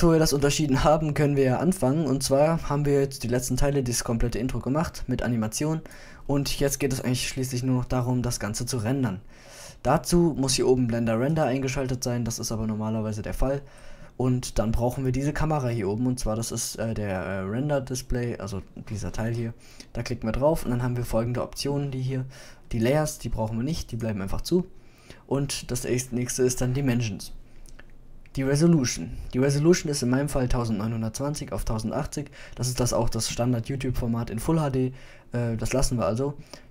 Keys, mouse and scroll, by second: 1.1 middle click, 1.5 middle click, 4.7-5.2 drag, 6.1 middle drag, 9.0 middle click, 13.2-15.9 middle drag, 21.2 middle click, 22.2-25.0 drag, 25.0 middle click, 36.4 click.